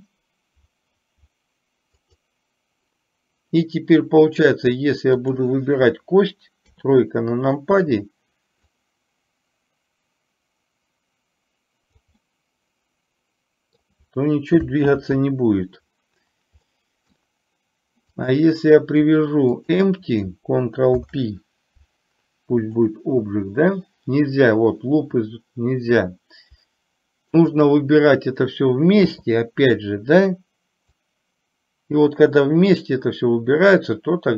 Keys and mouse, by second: 5.4 click, 8.9-12.2 drag, 12.3-13.8 middle drag, 15.2 ctrl+z, 16.8-17.2 middle drag, 18.2 click, 19.8 shift+click, 21.0 ctrl+p, 27.5 shift+click, 31.2-34.3 drag.